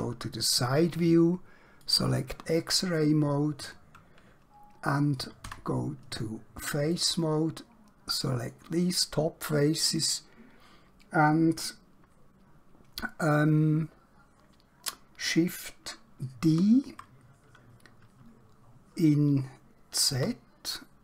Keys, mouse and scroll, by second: 1.7 click, 3.0 scroll up 1, 5.6 3, 7.0 click, 16.6 shift+d, 20.1 z.